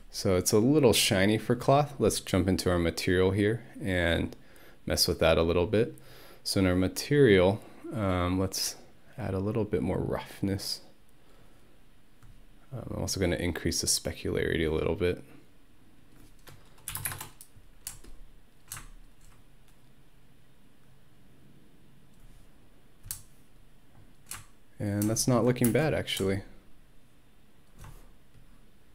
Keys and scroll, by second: 16.7-17.5 typing, 25.7 space.